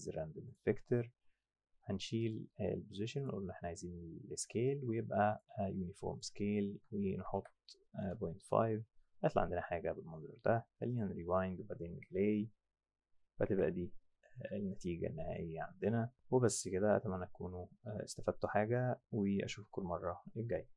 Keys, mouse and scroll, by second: 0.5 click, 2.2 click, 3.2 click, 5.3 click, 6.1 click, 7.0 KP_0, 7.1 KP_Decimal, 7.4 KP_5, 8.0 KP_Enter, 10.9 click, 12.0 F8, 13.5 F7.